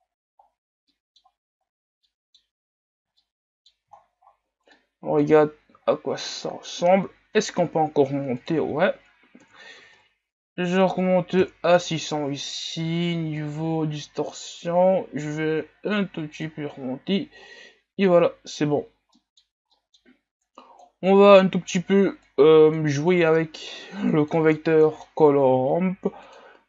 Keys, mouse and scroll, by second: 0.1 scroll down 2, 0.9-1.7 middle drag, 1.7-2.1 scroll down 2, 2.1-2.5 middle drag, 2.5-3.3 scroll up 3, 3.3-3.9 middle drag, 3.9-4.4 scroll down 12, 4.9-5.9 middle drag, 5.9 shift+scroll down 4, 6.1 scroll up 1, 11.5 KP_0, 13.8-16.9 drag, 16.9-18.7 scroll down 7, 20.4-26.6 drag.